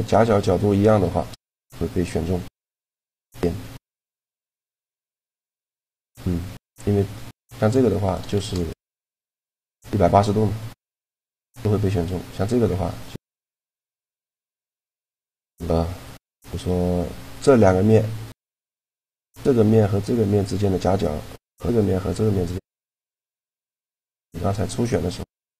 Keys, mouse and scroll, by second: 0.6 shift+g, 2.2-3.7 drag, 4.3-6.0 right drag, 4.6 shift+g, 7.0 click, 7.8 right click, 8.0 shift+g, 8.8 click, 10.6 middle click, 11.9-13.8 right drag, 14.0 click, 14.1 shift+g, 14.5-15.6 drag, 15.8-22.6 drag, 22.6-23.8 middle drag, 24.4 middle click, 25.0-25.5 right drag.